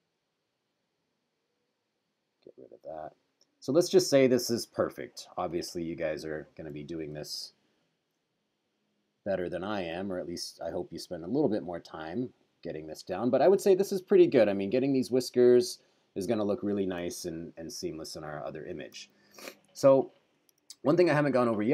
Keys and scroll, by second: 6.9 super+=, 17.2 super+-, 19.1 super+-, 20.8 super+-.